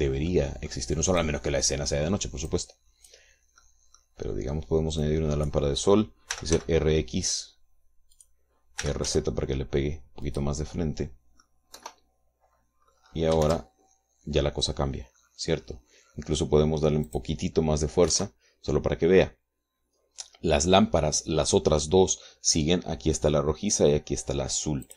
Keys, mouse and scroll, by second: 1.0 middle click, 1.9 click, 3.2 click, 4.3 middle click, 5.7-6.4 drag, 7.0 r, 7.2 x, 8.8 click, 9.5 r, 9.8 z, 11.0 click, 11.4 middle click, 12.4 KP_0, 13.6-14.1 scroll up 1, 14.2 shift+z, 17.8 click, 18.8 KP_3.